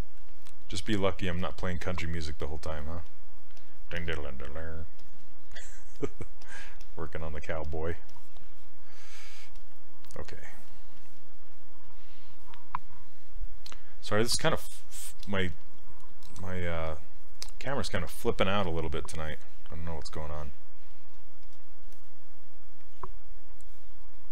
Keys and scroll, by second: 1.4 s.